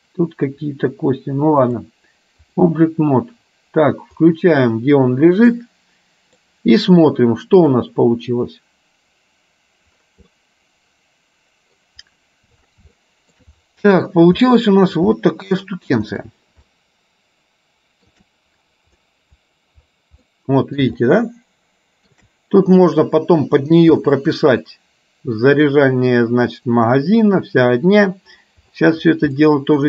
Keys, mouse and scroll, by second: 1.7 click, 4.4 click, 5.6 middle click, 10.4-11.9 middle drag, 13.0 shift+middle click, 14.5 middle click, 15.2 shift+middle click, 16.7-18.2 shift+middle drag, 20.2 middle click, 21.1-22.2 shift+middle drag, 24.1 click, 29.5 middle click.